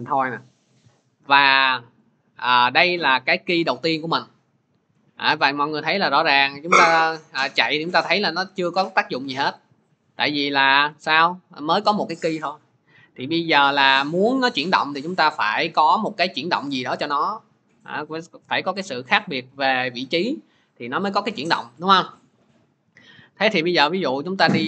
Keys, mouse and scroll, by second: 7.5 click, 8.4 click, 13.6 click, 14.0 click, 14.6 click, 19.0-24.6 drag.